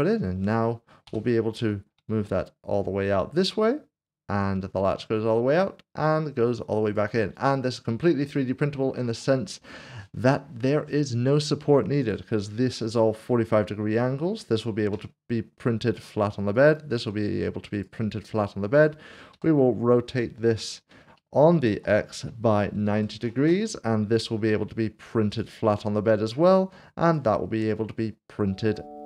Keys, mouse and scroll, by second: 0.0 click, 1.6 typing, 6.8 click, 7.2 right click, 8.3 middle click, 11.4 middle click, 11.8 click, 13.0 middle click, 14.9 g, 16.0 click, 17.7 click, 18.7 click, 18.9 middle click, 19.3 r, 21.7 typing, 22.8 typing, 23.4 Return, 25.3 click, 26.0 middle click, 27.6 click, 27.8 middle click.